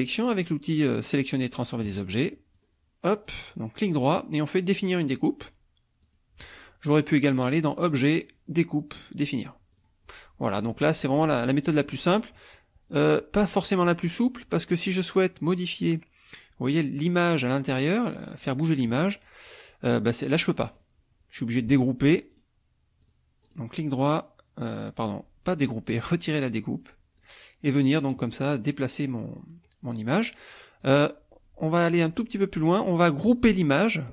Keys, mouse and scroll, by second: 1.8 click, 2.5 click, 3.7 right click, 6.1 click, 7.7 click, 9.8 click, 13.0 click, 19.3 click, 20.6 click, 22.3 right click, 23.0 click, 23.4 right click, 26.7 click, 27.2 click, 27.7 click, 29.1 click, 29.9 click, 30.8 click, 31.9 click.